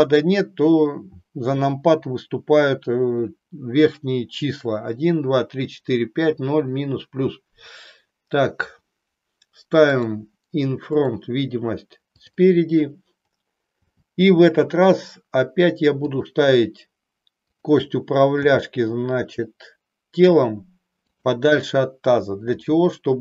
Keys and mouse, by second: 9.9 click, 10.9 click, 12.2 click, 13.9 g, 16.2 click, 17.5 click, 18.5 g.